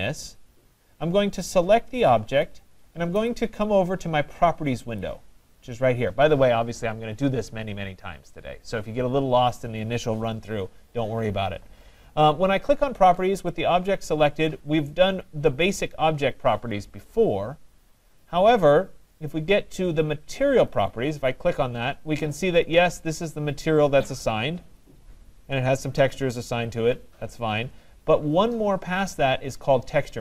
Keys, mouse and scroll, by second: 5.0 click, 20.7-22.7 drag, 23.9-25.7 drag.